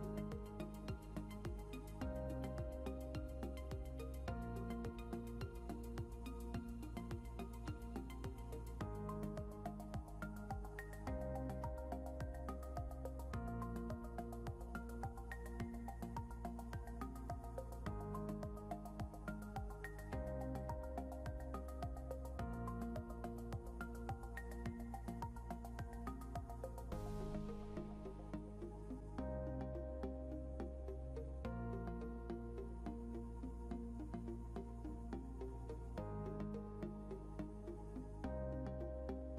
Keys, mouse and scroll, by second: 6.1-6.9 scroll up 1, 10.4 scroll down 1, 15.2 double click, 17.7 scroll up 1, 20.4 scroll down 1, 22.6 scroll up 1, 30.5 ctrl+g, 31.1 scroll down 1, 32.3 scroll up 1.